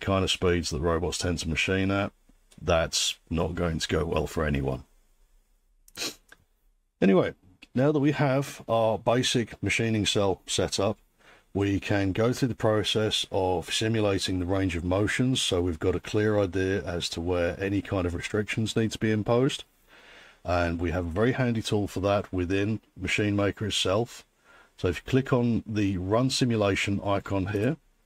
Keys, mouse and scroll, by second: 6.0 click, 27.6 click.